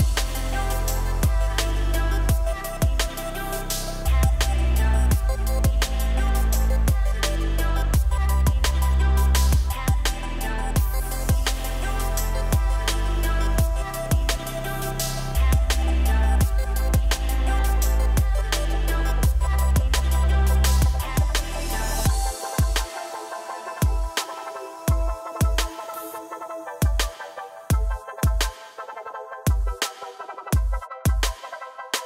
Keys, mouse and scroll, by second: 0.0 shift+click, 0.3 F3, 1.5 click, 1.9 shift+click, 2.3 shift+drag, 2.8 F3, 4.2 click, 4.6 shift+click, 4.9 shift+click, 5.4 F3, 6.9-8.4 middle drag, 9.0 click, 9.3 shift+click, 9.7 shift+click, 11.5 F3, 12.5-13.0 middle drag, 13.0 drag, 13.3-14.6 middle drag, 14.6 shift+click, 15.1 F3, 16.6 click, 17.7 shift+click, 18.2 F3, 19.4 click, 19.7 shift+click, 20.3 F3, 21.6 drag, 22.0 shift+click, 22.4 F3, 23.9 click, 24.3 shift+drag, 24.8 F3, 26.3 shift+click, 26.8 F3, 28.2 click, 28.6 shift+click, 29.0 F3, 30.2 middle click, 31.0 click, 31.2 shift+click, 31.5 shift+click, 31.9 F3.